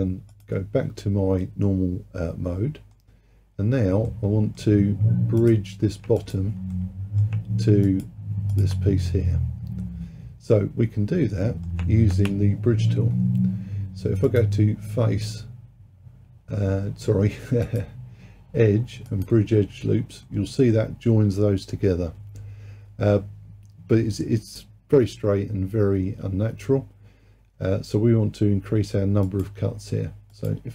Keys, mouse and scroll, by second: 0.4-1.5 drag, 1.5-3.5 middle drag, 3.5-4.0 scroll up 1, 4.1-5.4 middle drag, 5.4 click, 6.2 shift+click, 6.8-7.9 middle drag, 7.9 shift+click, 8.6 shift+click, 9.1-12.2 middle drag, 14.3-17.5 drag, 17.7-20.3 drag, 20.3-23.3 middle drag, 29.3-30.7 drag.